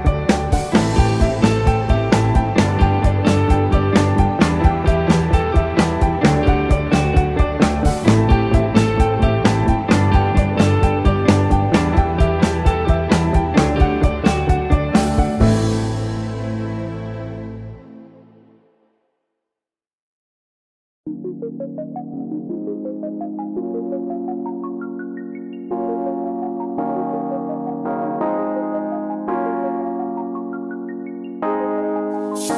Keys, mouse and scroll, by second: 1.1 click, 2.9 click, 3.3 click, 5.3 click, 6.4 click, 9.5 click, 9.8 click, 12.5 click, 13.7 middle click, 14.8 click, 16.3-16.6 scroll down 5, 17.3 click, 18.2 click, 20.0 click, 20.4 click, 22.1 click, 22.5 click, 24.8 click, 25.3 click, 26.3 click, 26.9 middle click, 27.9 click, 28.2 click, 29.0-29.5 scroll down 2, 29.5 click, 31.9 ctrl+z.